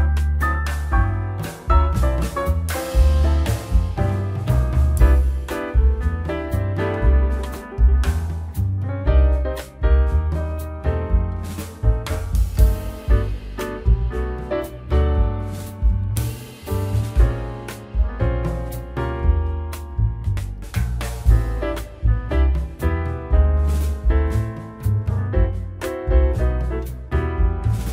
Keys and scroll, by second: 5.6 a, 6.5 Return, 7.3 k, 8.2 a, 9.1 Return, 16.6 k, 18.5 Return, 19.8 k, 20.8 a, 21.5 Return, 22.2 k, 23.0 a, 24.0 Return.